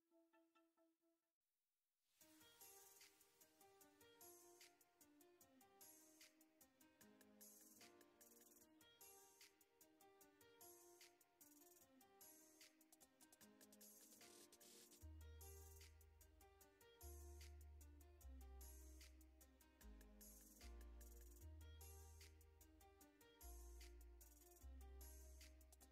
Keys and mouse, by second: 0.2 ctrl+click, 0.5 middle click, 0.8 middle click, 1.2 middle click, 1.5 middle click, 1.8 ctrl+click, 2.2 shift+click, 3.3 middle click, 3.8 middle click, 4.0 middle click, 4.1 f, 4.2 s, 4.2 click, 4.7 shift+click, 5.1 middle click, 5.8 f, 5.9 middle click, 6.0 shift+c, 6.4 middle click, 6.6 ctrl+click, 7.1 middle click, 7.4 shift+middle click, 7.9 ctrl+Tab, 8.3 ctrl+Tab, 9.6 ctrl+Tab, 11.1 ctrl+Tab, 11.9 middle click, 12.5 click, 12.9 middle click, 13.1 f, 13.2 middle click, 13.9 shift+c, 14.0 click, 14.1 middle click, 14.2 click, 14.7 click, 15.7 click, 16.2 click, 16.6 middle click, 17.3 ctrl+click, 17.6 shift+middle click, 17.7 ctrl+click, 18.6 middle click, 18.9 f, 19.0 shift+click, 19.4 shift+click, 19.5 middle click, 19.7 shift+click, 20.1 f, 20.4 shift+c, 20.6 ctrl+click, 20.8 middle click, 21.3 ctrl+click, 21.7 ctrl+middle click, 21.8 f, 21.9 s, 22.0 click, 23.3 shift+click, 23.6 middle click, 23.9 f, 24.0 shift+c, 24.1 ctrl+click, 24.4 ctrl+z, 24.5 ctrl+z, 24.6 click, 25.1 click.